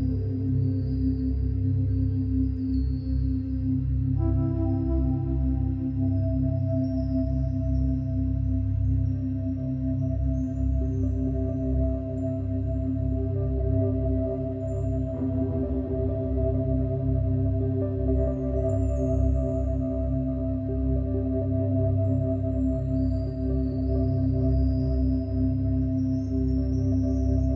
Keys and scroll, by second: 0.5 ], 2.6 space, 5.7 ctrl+z, 9.0 space, 10.8 space, 14.6 space, 19.2 space.